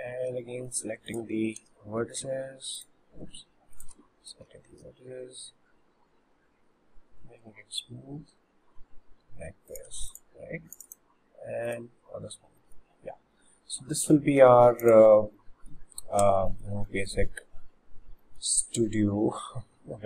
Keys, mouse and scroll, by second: 0.3 2, 1.1-3.8 alt+shift+drag, 4.8 ctrl+b, 9.9 Tab, 10.1 click, 10.4 scroll up 3, 10.8 click, 10.9-12.2 right drag, 12.2 scroll down 3, 12.6-13.3 middle drag, 13.3 scroll up 2, 14.5 ctrl+1, 14.9 click, 15.4-15.9 middle drag, 15.9 scroll down 1, 16.5-17.8 shift+middle drag, 17.8 scroll up 2, 18.2-20.0 shift+middle drag.